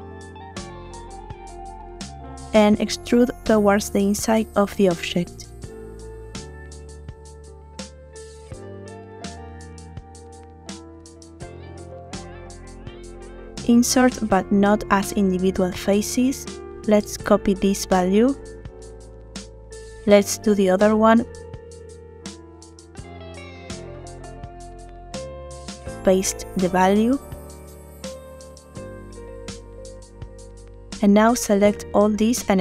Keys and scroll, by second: 2.7 e, 11.0 i, 19.1 ctrl+c, 24.3 i, 27.7 ctrl+v, 28.7 Return.